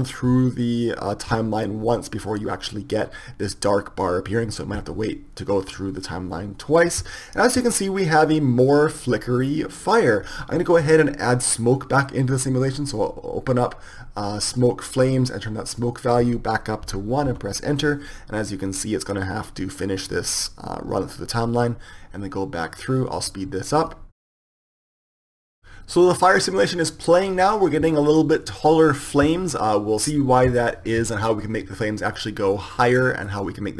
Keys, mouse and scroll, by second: 14.9-30.4 drag, 32.4-33.7 middle drag.